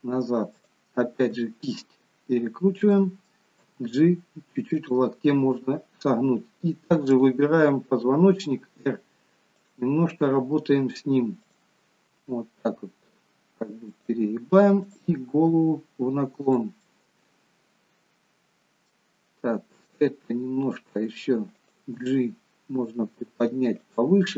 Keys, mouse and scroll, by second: 1.3 r, 3.8 g, 7.2 click, 8.4 r, 11.7 click, 12.2 r, 15.0 click, 15.4 r, 16.9 middle click, 19.9 click, 20.2 r, 22.0 g.